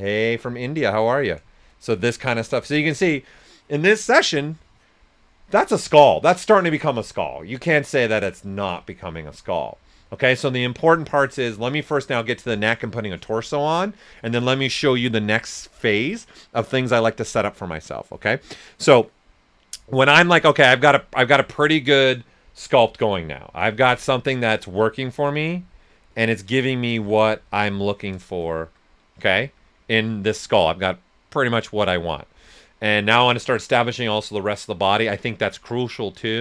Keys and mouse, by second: 0.2 right click, 0.7 shift+click, 1.2 shift+right click, 20.9-23.6 right drag, 20.9 typing, 24.5 alt+click, 26.9-27.6 typing, 28.1 right click, 28.5 alt+shift+right click, 31.1-31.8 typing.